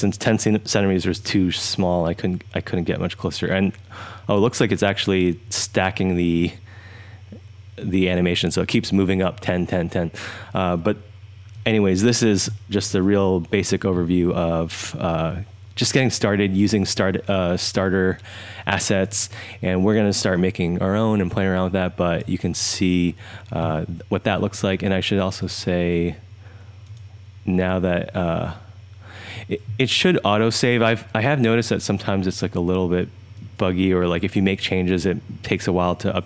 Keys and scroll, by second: 12.7-13.7 typing, 16.4 1, 16.9 1, 17.7 3, 18.2-19.0 3, 20.3 3, 20.8 3, 21.4 3, 21.9 3.